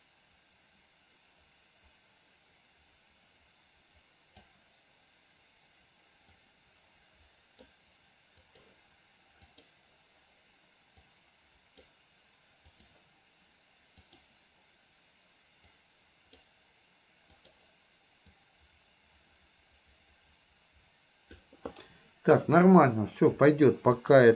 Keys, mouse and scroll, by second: 6.4-7.8 drag, 8.6 click, 9.6 click, 11.2 click, 14.2 click, 15.9 click, 17.5 click, 18.4-21.6 drag, 23.9 click.